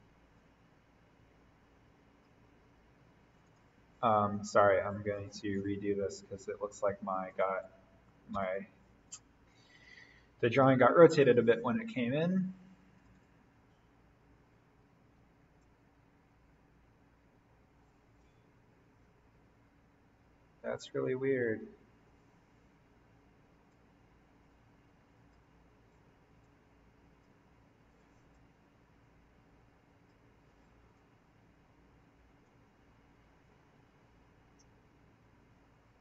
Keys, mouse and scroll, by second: 0.3-3.4 drag, 6.5 Delete, 7.3 click, 8.3 ctrl+d, 9.1 click, 12.9 click, 19.4-20.3 scroll up 1, 23.6-34.9 drag.